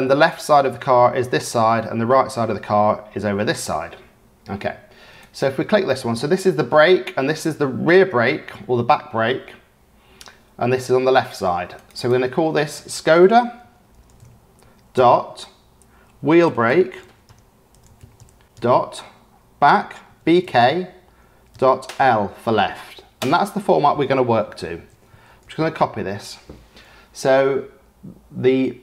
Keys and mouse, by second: 11.9-24.3 drag, 17.0 e, 18.4 e, 25.0-27.2 drag.